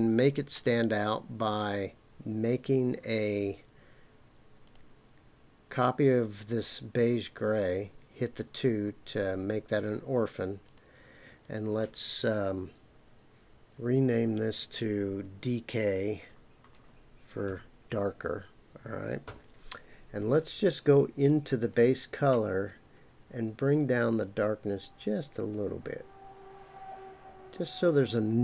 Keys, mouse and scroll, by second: 0.3-1.9 scroll up 3, 4.6 click, 8.5 click, 10.6-19.8 drag, 13.7 BackSpace, 14.1 BackSpace, 21.6 click.